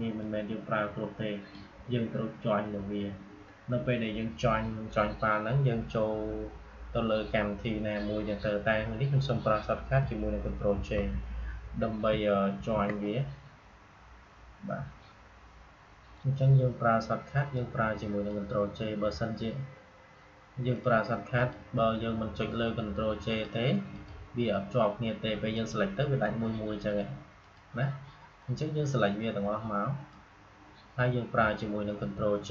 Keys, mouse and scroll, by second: 0.1-4.0 drag, 16.1-20.6 drag, 20.6-32.5 drag.